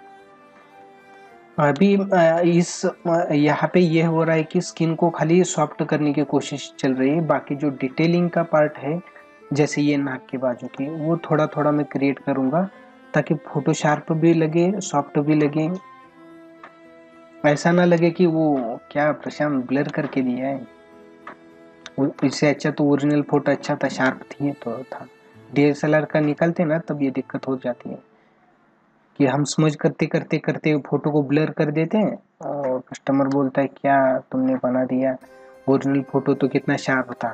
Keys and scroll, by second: 1.1 space, 10.8 space, 19.3 space, 22.1 ctrl+alt+z, 23.5 space, 32.4 space, 37.1 space.